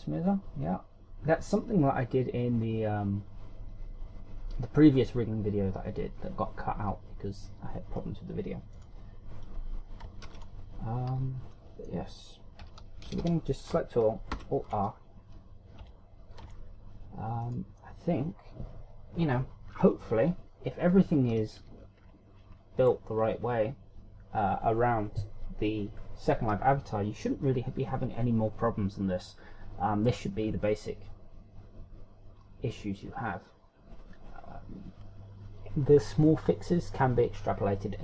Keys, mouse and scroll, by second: 9.8 right click, 11.2 alt+r, 12.1-12.7 scroll down 3, 12.6 middle click, 13.6 KP_1, 14.1 a, 14.2 a, 15.4 alt+r, 16.9 Tab, 17.5 Tab, 18.5 right click, 21.7-22.2 ctrl+scroll down 5, 23.0-23.7 shift+scroll down 8, 24.2 scroll down 1.